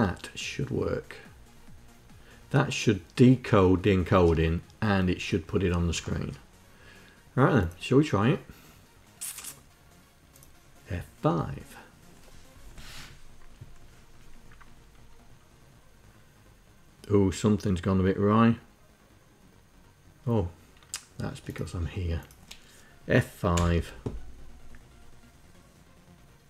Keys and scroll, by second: 23.0 F5.